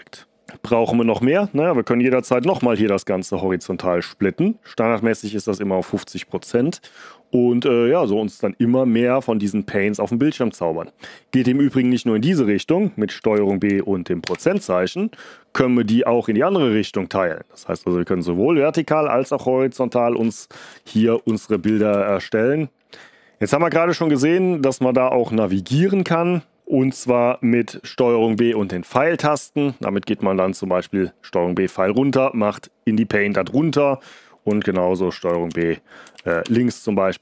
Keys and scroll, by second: 2.0 ctrl+b, 2.3 shift+', 13.3 ctrl+b, 14.2 shift+5, 20.9 ctrl+b, 21.2 Up, 21.6 ctrl+b, 21.8 Up, 28.3 ctrl+b, 28.9 Down, 35.1 ctrl+b, 35.4 Down, 36.1 ctrl+b, 36.4 Left.